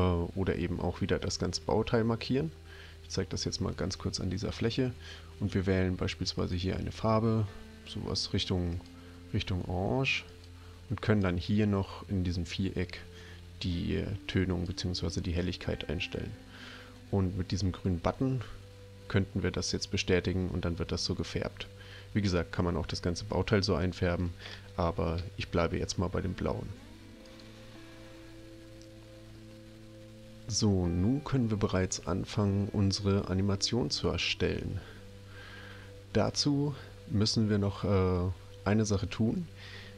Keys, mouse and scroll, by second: 6.4 click, 10.3 click, 11.2-14.7 drag, 25.2 Escape, 27.2 click.